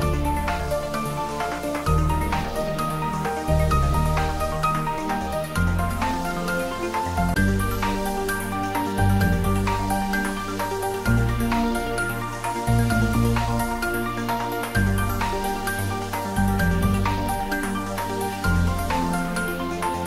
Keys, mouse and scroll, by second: 3.1-3.5 scroll up 1, 4.5 shift+click, 6.0 click, 10.8 scroll down 1, 12.2 Tab, 13.0-13.6 scroll down 1, 15.0 scroll up 1, 18.2 scroll up 1.